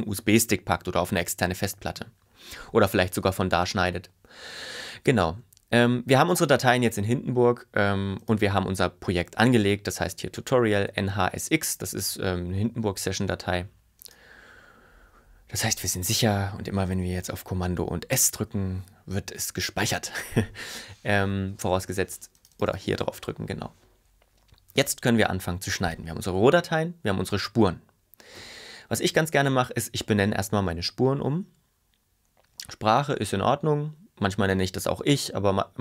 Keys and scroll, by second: 18.3 super+s.